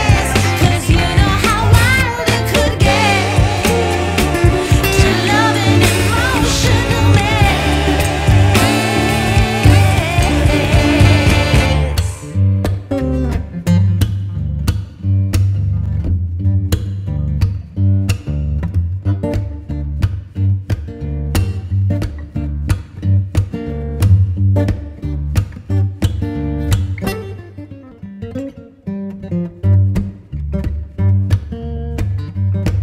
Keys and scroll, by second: 0.2 F2, 11.2 Escape, 14.6 Escape, 25.3 F4, 27.3 shift+Page_Up, 28.3 F2, 29.7 Escape, 31.7 e.